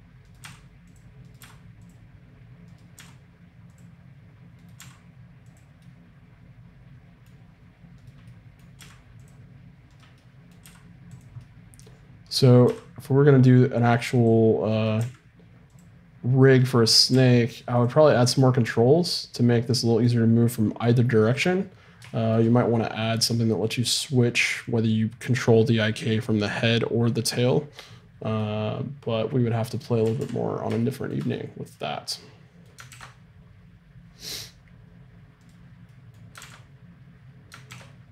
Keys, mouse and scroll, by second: 0.4 r, 1.4 r, 3.0 r, 4.8 r, 5.8 middle click, 8.8 middle click, 8.8 r, 10.6 r, 12.7 r, 15.0 r, 16.6 right click, 17.1 r, 18.1-22.1 middle drag, 30.0 a, 30.2 a, 32.9 ctrl+e, 35.5-37.7 drag, 36.1-37.7 right drag, 36.5 ctrl+r, 37.7 ctrl+e.